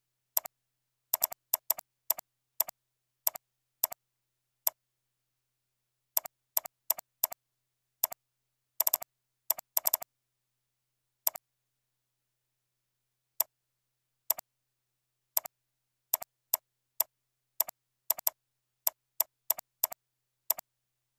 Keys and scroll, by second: 9.3 ctrl+b, 10.3 ctrl+shift+,.